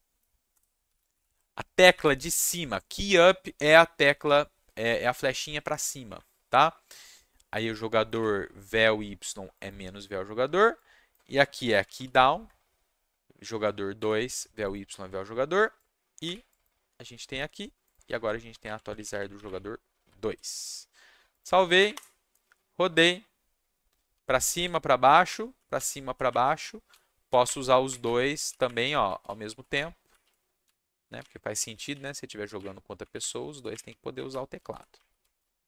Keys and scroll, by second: 0.5 BackSpace, 0.8 shift+u, 1.1 shift+p, 1.9 Escape, 6.0 Up, 8.1 2, 11.3-12.4 typing, 14.0 2, 16.2 2, 18.6 alt+Left, 18.8 alt+Left, 18.9 alt+Left, 19.4 2, 20.2 ctrl+shift+s, 21.7 Up, 21.9 Return, 24.1 w, 24.6 s, 25.2 Up, 25.7 Down, 26.2 Up, 26.8-35.6 typing, 26.9 Down, 27.4 Up, 28.4 Down, 28.6 Up, 29.2 Down, 29.7 Up, 30.6 Down, 31.2 Up, 31.9 Down, 33.0 Up, 33.2 Down, 33.7 Up, 34.3 Down.